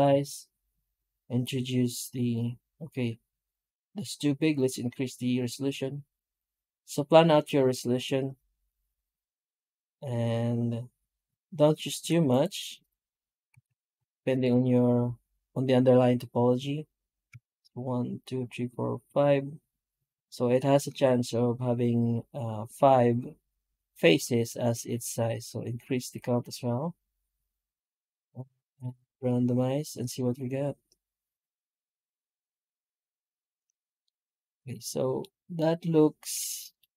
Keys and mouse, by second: 33.9-34.6 middle drag, 34.7-35.0 middle drag, 35.4-36.2 middle drag, 36.4 shift+middle drag.